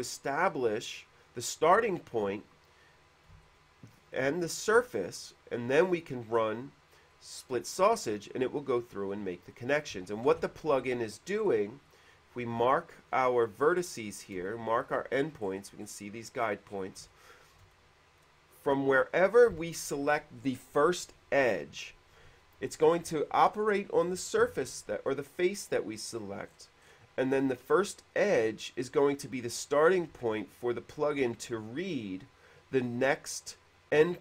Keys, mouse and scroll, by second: 0.1 middle click, 0.3 middle click, 1.8 click, 2.9 ctrl+z, 3.7 shift+click, 4.3 shift+middle click, 7.3 middle click, 7.5-8.4 scroll down 1, 8.4-8.9 scroll down 1, 9.8 middle click, 10.5 ctrl+z, 11.5-11.9 scroll up 1, 12.0 click, 12.3 click, 13.2 click, 14.7 shift+middle click, 15.7 middle click, 16.1 middle click, 16.6 middle click, 17.3 shift+middle click, 23.7 middle click, 25.6 middle click, 26.3 middle click, 26.7 middle click, 28.9 click, 29.7 middle click.